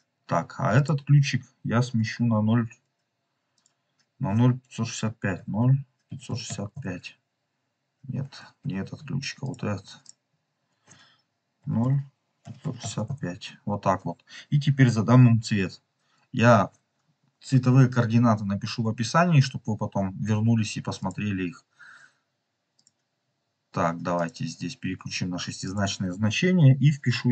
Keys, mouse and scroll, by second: 3.5 click, 8.5 ctrl+z, 9.3 click, 9.9 click, 12.9 click, 20.9 click, 22.7 click.